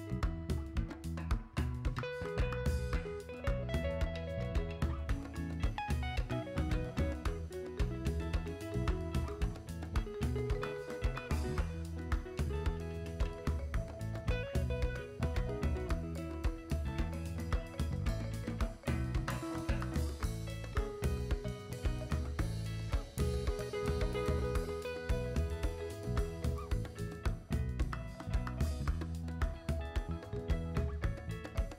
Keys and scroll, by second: 12.3-13.3 typing, 17.5 x, 17.9 v, 25.0 s, 27.1 b, 31.5 z.